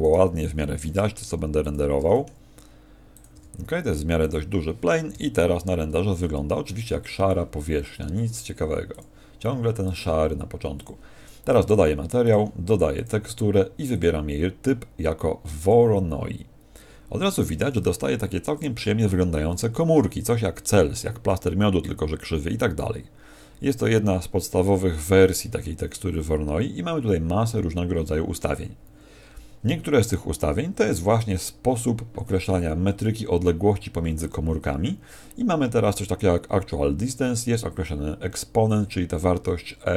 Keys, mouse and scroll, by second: 0.0 right click, 0.7 shift+f, 1.7 click, 1.9 g, 3.1 click, 3.3 g, 4.3 click, 5.1 click.